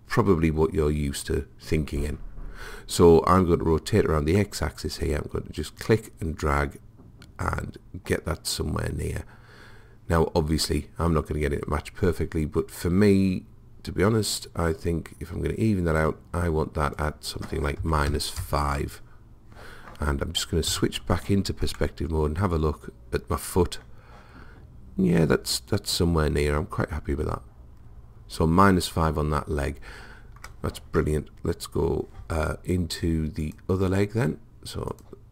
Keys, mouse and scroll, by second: 5.8 click, 16.9 click, 20.7 KP_5, 33.5-35.3 drag.